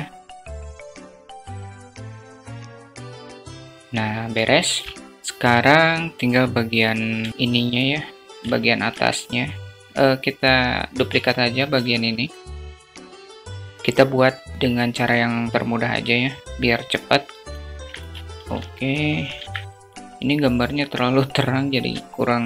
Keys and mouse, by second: 0.2 click, 0.4 s, 9.8 shift+a, 10.0 shift+d, 12.1 s, 12.9 alt+z, 15.7-17.0 drag, 17.5 alt+z, 18.3 alt+z, 19.6 middle click, 21.0-21.3 alt+shift+middle drag, 21.8-22.3 alt+shift+drag.